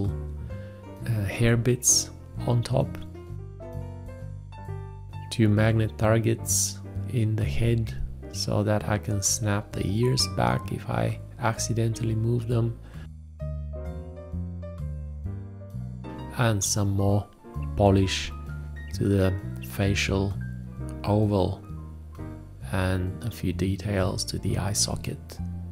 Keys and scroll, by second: 0.3 BackSpace, 1.9 ctrl+Tab, 2.1 ctrl+s, 3.3 ctrl+s, 3.5 ctrl+s, 4.2 ctrl+Tab, 4.4-5.2 typing, 6.9 ctrl+a, 7.0 space, 7.3 shift+`, 7.8 alt+`, 8.4 ctrl+a, 8.9 ctrl+a, 9.0 space, 9.5 ctrl+a, 10.9 ctrl+s, 10.9 ctrl+Tab, 11.7 ctrl+Tab, 12.9 F2, 12.9 ctrl+space, 15.6 a, 15.7 BackSpace, 15.8 ctrl+z, 16.1 BackSpace, 16.5 ctrl+Tab, 17.2 ctrl+s, 17.3 ctrl+Tab, 17.4 ctrl+a, 19.0 ctrl+space, 19.7 Escape, 20.1 ctrl+v, 20.3 b, 20.4 ctrl+s, 20.9 Escape, 20.9 b, 21.7 Escape, 21.9 ctrl+space, 22.1 ctrl+a, 22.3 v, 24.5 ctrl+Tab, 24.9 ctrl+s, 25.2 ctrl+Tab, 25.3 ctrl+a, 25.4-25.7 typing.